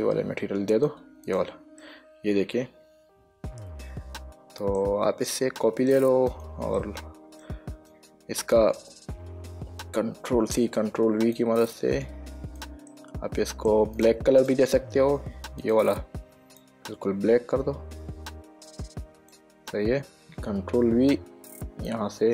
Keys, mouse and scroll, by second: 1.0 click, 2.1 middle click, 5.7 middle click, 6.6 click, 7.1 middle click, 8.2 click, 10.6 ctrl+c, 10.9 ctrl+v, 11.7 click, 13.2 middle click, 14.3 click, 15.9 click, 22.2 click.